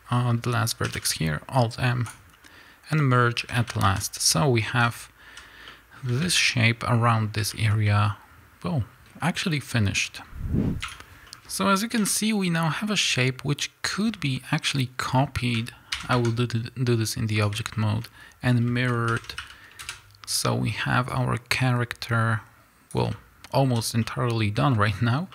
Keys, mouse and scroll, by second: 2.0 alt+m, 3.1 scroll down 1, 3.3 a, 5.3 z, 5.6-10.3 middle drag, 6.0 a, 7.1 scroll down 1, 9.0-9.4 scroll up 2, 10.1 scroll down 2, 10.3 click, 10.8 drag, 11.0 scroll down 2, 11.2-21.0 middle drag, 11.9 KP_1, 12.5-13.8 scroll up 2, 13.8 z, 13.9-15.1 scroll down 2, 15.1-15.8 scroll up 2, 15.8 shift+d, 19.0 ctrl+m, 19.8 KP_Enter, 21.0-23.9 drag, 23.7 z, 23.9-25.3 middle drag.